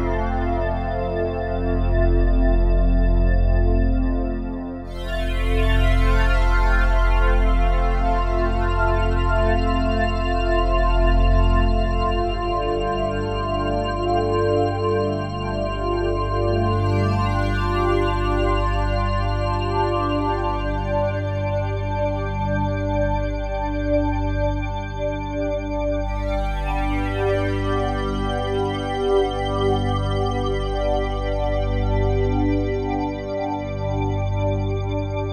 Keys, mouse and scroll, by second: 2.0 click, 6.3 r, 6.6 y, 8.4 click, 9.6 Tab, 9.6 typing, 10.1 click, 12.4 g, 14.7 click, 15.8 Tab, 16.4 click, 17.4-18.1 typing, 18.8 Escape, 19.9 r, 20.2 y, 21.7 click, 22.9 g, 24.5 g, 25.6 click, 27.4 g, 28.1 click, 29.2-29.7 ctrl+alt+drag, 31.4-34.5 drag.